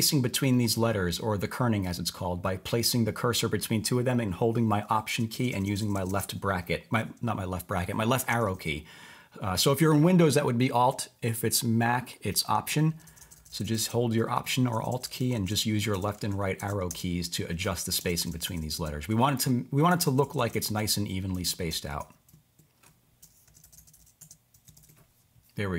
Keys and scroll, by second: 5.3 alt+Left, 5.5 alt+Left, 5.6 alt+Left, 6.5 alt+Right, 8.3 alt+Left, 8.6 alt+Right, 12.5 Right, 12.9 alt+Left, 13.1 alt+Left, 13.2 alt+Left, 14.3 Right, 14.7 alt+Left, 14.9 alt+Left, 15.1 alt+Left, 16.6 Left, 17.4 Right, 17.6 Right, 18.0 alt+Left, 18.1 alt+Left, 18.3 alt+Left, 19.2 Right, 19.9 alt+BackSpace, 20.0 alt+BackSpace, 20.2 alt+BackSpace, 21.3 Left, 22.0 Right, 23.5 Left, 23.6 Left, 23.7 Left, 23.9 Left, 24.2 Left, 24.5 Right.